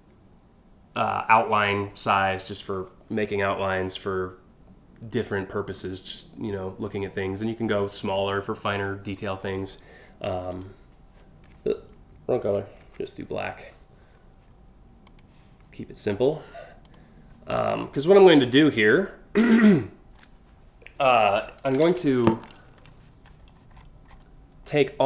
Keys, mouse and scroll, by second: 10.1 click, 12.4 ctrl+z, 14.6 click, 15.9 click, 16.5 click, 17.4 scroll up 1, 17.9 scroll down 1, 18.1-18.8 scroll up 3, 23.3-23.8 scroll down 2.